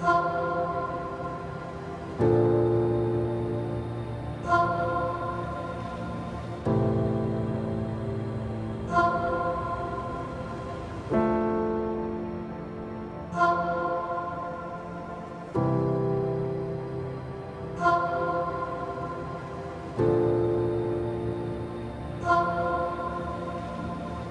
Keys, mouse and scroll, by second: 0.0-0.7 typing, 1.4 Up, 6.5 f, 7.6-9.4 typing, 9.6 Down, 11.0 Return, 11.3-12.8 typing, 14.2 space, 15.1 u, 15.6 Up, 16.0 ctrl+a, 17.4-24.3 drag.